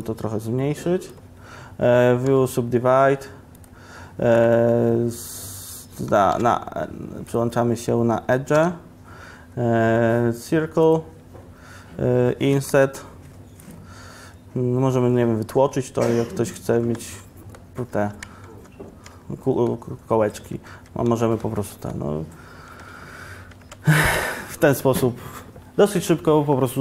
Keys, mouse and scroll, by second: 2.4 w, 6.4 3, 8.6 3, 15.7 i, 15.7 e, 16.8 click, 16.9 Tab, 18.6 ctrl+1, 19.0 ctrl+1, 20.5 Tab, 20.8 Tab.